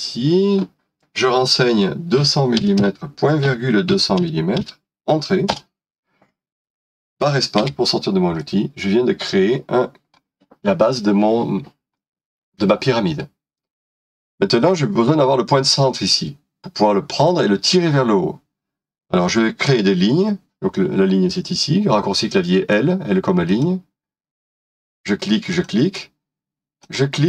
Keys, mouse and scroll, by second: 2.2-5.1 typing, 7.6 space, 8.4 middle click, 14.0 middle click, 14.1-16.0 scroll up 1, 19.2 i.